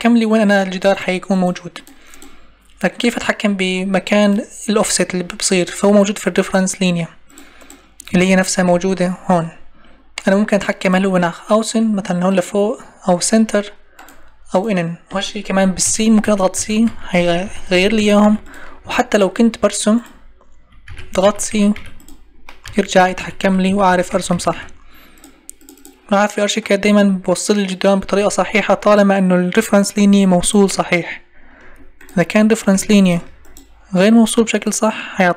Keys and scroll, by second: 8.1 Escape, 28.2 Escape, 31.6 Escape.